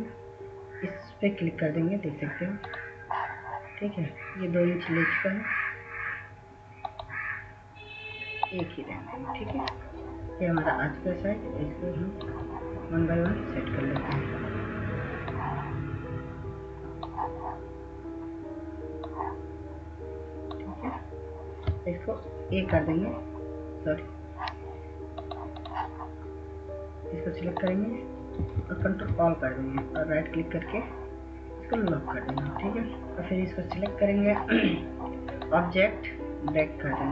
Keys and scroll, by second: 22.6 ctrl+z, 29.0 ctrl+a.